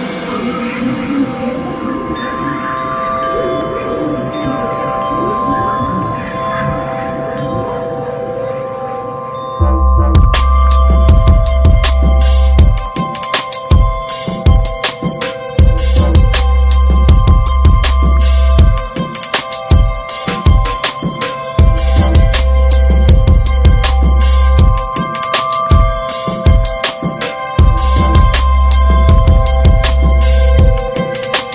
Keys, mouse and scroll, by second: 0.1 middle click, 0.8 alt+middle click, 1.2-2.3 shift+middle drag, 2.3 click, 3.4 e, 4.3 click, 4.8 shift+middle click, 5.5 r, 11.7 click, 13.2 e, 16.3 click, 17.5 s, 25.2 click, 25.8 shift+middle click, 26.4 click, 27.0 shift+middle click, 27.4 e, 28.5 shift+middle click, 29.2-30.3 drag, 30.3 s.